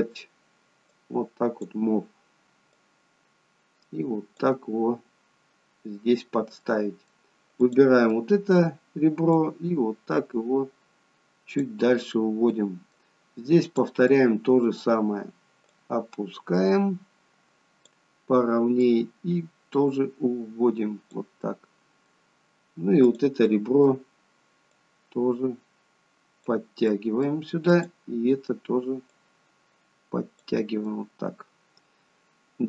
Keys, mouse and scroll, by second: 1.0 click, 6.7 middle click, 7.6 click, 8.2 middle click, 9.4 click, 12.0 middle click, 13.6 click, 14.1 middle click, 15.7 click, 21.5 middle click, 23.1 click, 23.5 middle click, 24.8 click, 26.9 middle click, 27.7 click, 29.1 click, 30.9 middle click.